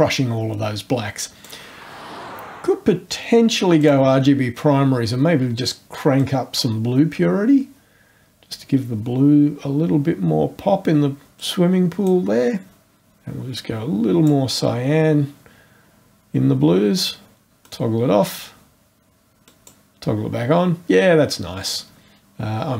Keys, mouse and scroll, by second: 3.8 click, 6.2-12.2 drag, 13.0 click, 14.4-15.2 scroll up 1, 17.6 click, 19.4 click.